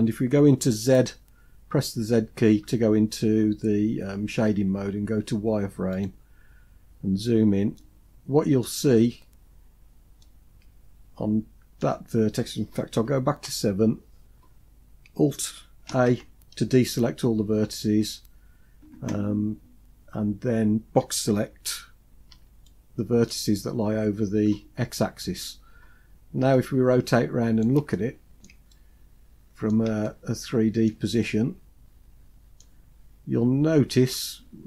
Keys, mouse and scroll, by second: 2.0 z, 3.6 z, 6.7-7.6 scroll up 5, 7.6-8.7 middle drag, 8.8 scroll down 2, 9.0-9.9 scroll down 4, 10.0-11.6 middle drag, 13.2 KP_7, 14.0-14.7 scroll up 3, 15.7 alt+a, 17.2-18.8 scroll up 3, 18.8-20.5 scroll up 1, 22.2 b, 25.9-26.5 scroll down 3, 26.4-27.6 middle drag, 27.7 shift+middle click, 28.5-29.6 middle drag, 29.9 shift+middle click, 31.0-32.7 middle drag, 32.7-33.1 scroll up 2, 33.3-34.0 scroll down 3, 34.0-34.6 shift+middle drag.